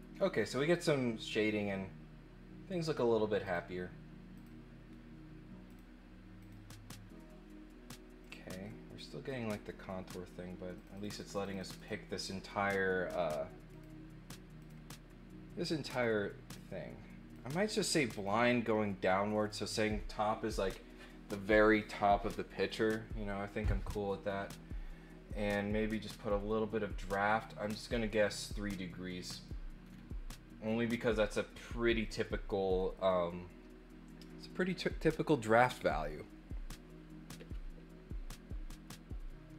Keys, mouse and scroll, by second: 0.1 scroll up 1, 3.4 click, 4.3 click, 5.7 click, 6.4 click, 8.2 click, 8.6 middle click, 10.7 click, 10.9 click, 11.1 click, 11.2 click, 11.4 click, 11.6 click, 13.7 click, 14.6 click, 15.9 click, 16.5 click, 18.1 click, 18.7 middle click, 25.4 click, 27.6 click, 27.8 click, 28.7 middle click, 29.8 scroll up 1, 30.3 middle click, 32.0 middle click.